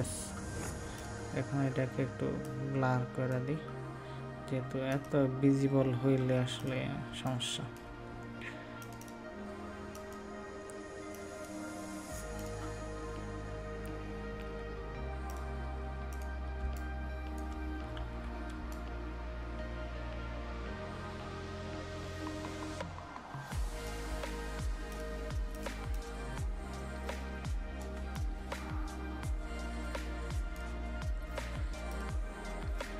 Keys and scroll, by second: 7.0 ctrl+space, 17.9 ctrl+z.